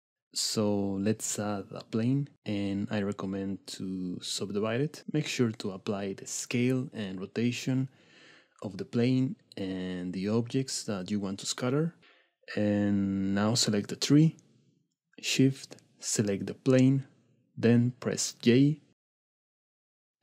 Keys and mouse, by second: 0.5 middle click, 1.0 click, 1.6 Tab, 2.0 middle click, 3.9-4.5 drag, 6.9 click, 8.1 click, 9.4 click, 11.0 Tab, 15.0 shift+middle click, 18.3 j.